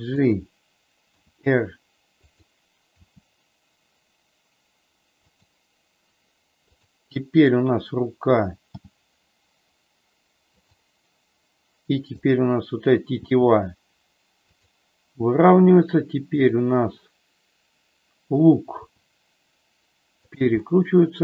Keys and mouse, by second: 0.1 click, 1.1 r, 2.2 click, 2.9 g, 8.6 g, 12.1 click, 13.1 g, 16.4 click, 18.7 r, 20.5-21.2 middle drag.